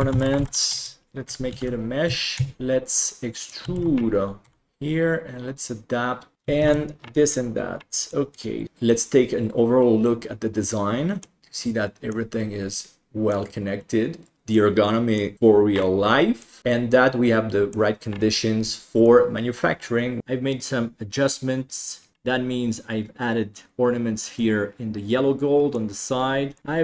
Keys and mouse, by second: 1.5 alt+c, 2.0 Tab, 2.3 a, 3.4 click, 3.7 alt+z, 4.4 e, 4.7 g, 6.3 alt+a, 7.4 ctrl+s, 8.1 middle click, 8.6-11.2 middle drag, 11.4-12.1 middle drag, 12.8-14.3 middle drag, 14.5-15.1 middle drag, 16.4 middle drag, 16.7-17.7 middle drag, 19.0-20.2 middle drag, 20.9-22.1 middle drag, 24.5-25.9 middle drag, 26.6 shift+middle click.